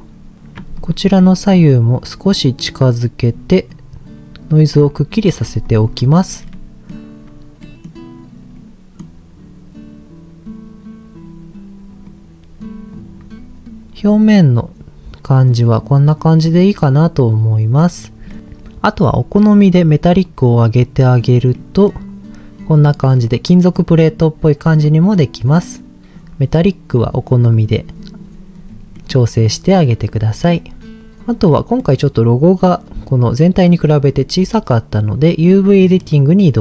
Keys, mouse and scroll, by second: 0.8 ctrl+shift+click, 1.5 click, 2.5 click, 3.7 click, 4.6 click, 5.6 ctrl+shift+click, 6.5-7.0 middle drag, 7.6 middle drag, 8.5 middle click, 12.0 click, 12.9 click, 14.0 middle click, 16.5 middle click, 17.5-17.8 middle drag, 18.3 middle click, 18.4 scroll up 1, 20.2 click, 21.5 middle click, 22.5-23.1 scroll down 2, 23.1 click, 23.5 middle click, 24.1 click, 24.6 middle click, 25.2-25.7 scroll up 1, 26.1-28.2 drag, 28.5-29.0 scroll down 2, 29.0 middle click, 29.3 click, 30.5-31.0 scroll down 1, 31.0 click, 31.5 middle click, 35.9 click.